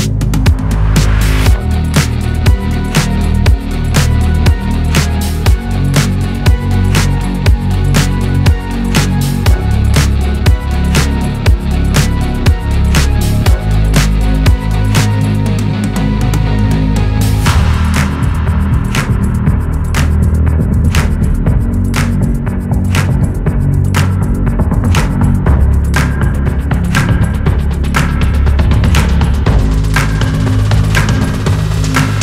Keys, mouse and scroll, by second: 3.6 Delete, 10.4-10.9 drag, 11.1-14.1 drag, 15.5-19.5 middle drag, 21.5-22.6 drag, 22.9-24.0 drag, 24.4-25.6 drag, 25.7-27.3 middle drag, 27.3-28.3 drag, 28.3-29.8 middle drag, 29.8-30.9 drag, 31.5-32.2 drag.